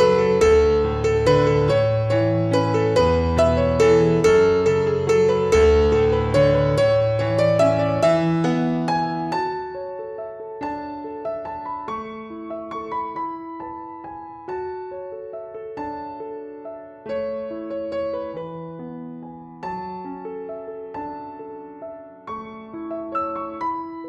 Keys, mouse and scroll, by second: 0.7 click, 2.0 shift+click, 2.9 click, 5.9 click, 8.2 Return, 9.5 click, 11.6 ctrl+t, 13.1 shift+click, 14.0 click, 16.3 Return, 18.0 click, 20.3 click.